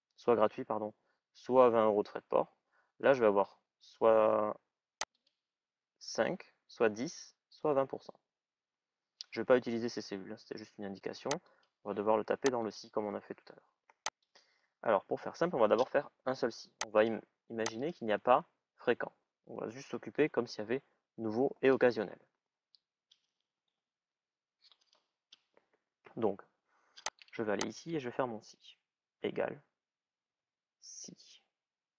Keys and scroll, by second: 30.0 shift+s.